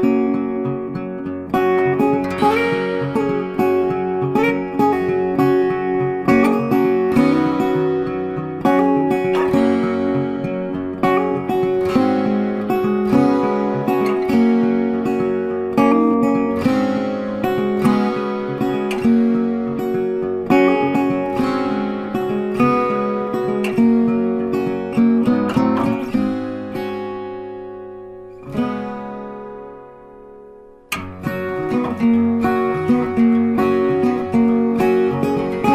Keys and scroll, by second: 10.0 ctrl+t, 23.4 ctrl+t.